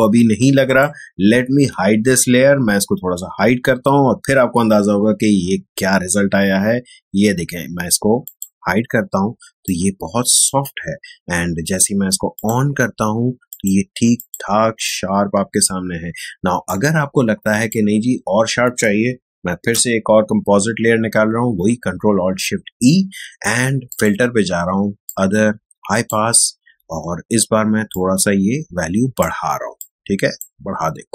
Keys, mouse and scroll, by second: 8.2 click, 9.3 space, 9.6 click, 9.8 space, 12.3 click, 14.6 space, 14.8 click, 15.1 space, 16.6-19.5 drag, 19.5 ctrl+alt+shift+e, 23.8-31.1 drag.